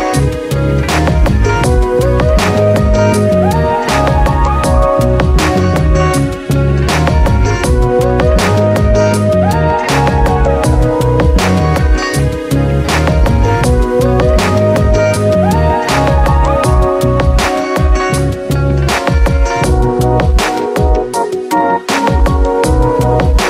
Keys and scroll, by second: 22.5 Return.